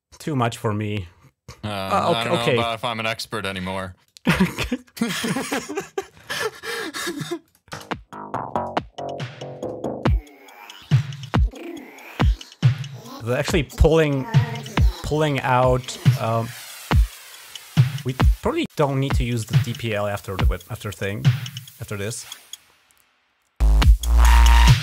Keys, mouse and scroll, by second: 3.9 click, 5.3 space, 6.0 click, 7.3 click, 7.5 typing, 11.9 click, 12.6 right click, 15.0 click, 18.1 click, 18.9 click.